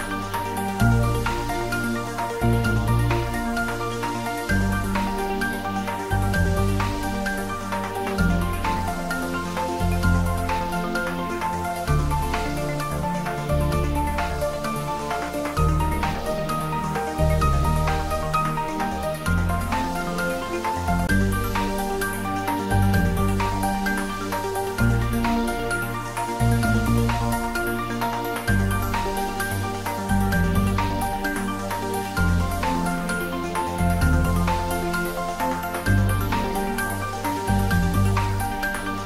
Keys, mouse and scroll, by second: 0.5-1.4 middle click, 1.8-3.3 drag, 11.3 click, 12.5-13.9 typing, 16.6 click, 30.2 click.